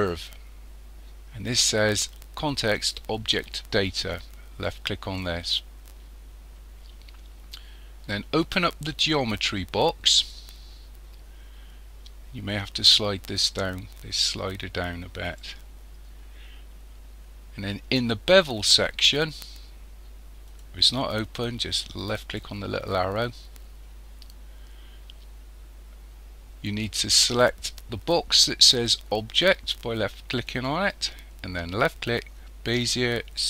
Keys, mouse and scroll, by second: 4.7 click, 10.1 click, 12.5 click, 20.5 click, 22.2 click, 23.0-24.0 scroll down 3, 24.0-26.8 scroll down 2, 30.5 click.